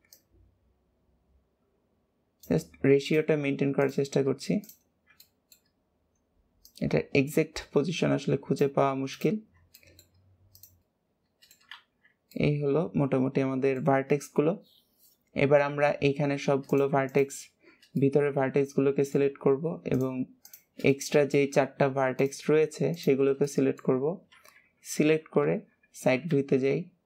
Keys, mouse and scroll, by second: 0.0 click, 2.9 click, 3.7 click, 4.5 click, 4.9 scroll down 2, 5.1-6.6 shift+middle drag, 6.6 click, 9.1 click, 9.7 shift+middle click, 10.5 click, 10.8 middle click, 11.7 alt+z, 11.9-12.3 scroll down 2, 12.3-15.3 middle drag, 16.6 click, 17.0 alt+shift+click, 17.9-19.9 middle drag, 19.9 shift+click, 20.3 shift+click, 20.9-22.1 middle drag, 22.1 shift+click, 22.9 shift+click, 23.3 middle click, 24.3 KP_1, 25.8-26.3 scroll down 3, 26.3 alt+z, 26.7 scroll up 3.